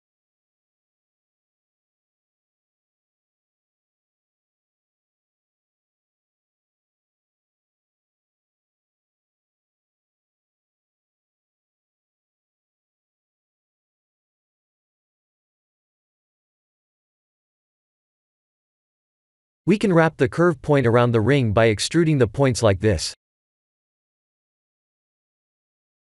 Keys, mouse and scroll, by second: 0.7 middle click, 0.9 middle click, 4.3 KP_3, 6.4 g, 9.7 Tab, 10.5 e, 12.6 shift+z, 13.5 e, 15.6 e, 17.6 KP_3, 18.5 KP_1, 19.6 g, 21.5 e, 23.1 KP_1, 23.5 KP_3, 24.5 middle click.